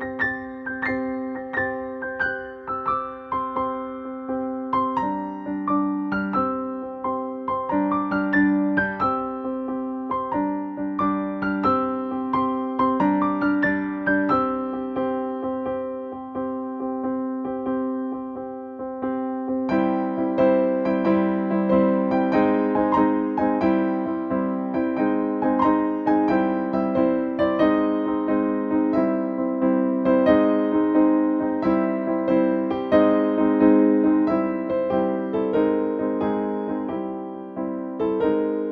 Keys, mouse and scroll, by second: 4.5 click, 9.0 click, 9.5 ctrl+space, 11.0 click, 13.9 click, 21.5 typing, 23.5 click, 24.6 typing, 27.5-29.5 drag.